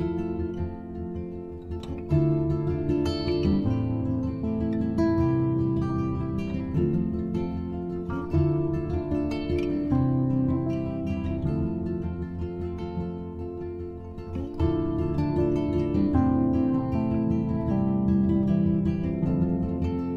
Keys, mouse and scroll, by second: 1.7-4.7 drag, 7.3 scroll down 1, 8.5 click, 13.3-16.4 drag, 17.0 scroll down 2.